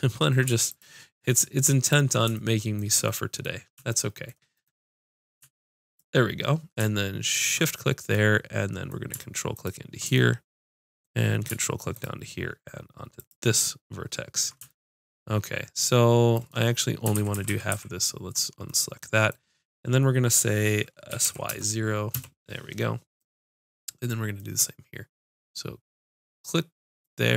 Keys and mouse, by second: 0.7-2.6 drag, 17.2-17.5 ctrl+z, 18.5 ctrl+z, 21.1 s, 21.2 ctrl+z, 22.1 click, 27.0-27.3 drag.